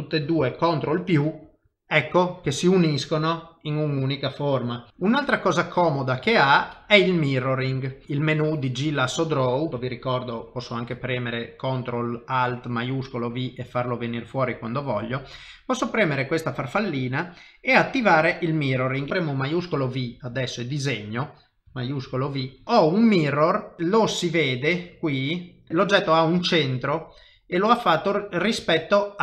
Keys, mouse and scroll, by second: 1.2 ctrl+KP_Add, 2.0 middle click, 5.1 middle click, 6.3 shift+middle click, 7.7 click, 8.7 middle click, 10.6 ctrl+alt+shift+v, 19.1 middle click, 19.7 shift+v, 20.3 click, 22.2 shift+v, 22.6 middle click, 23.8 shift+middle click, 24.3 middle click, 25.7 g.